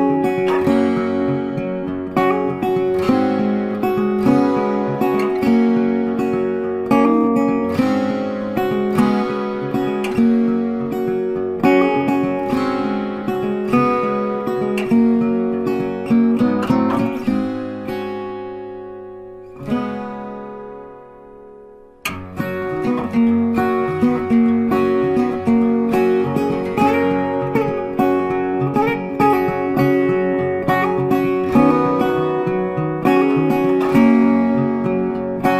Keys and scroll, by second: 26.1 Delete, 28.2 ctrl+d.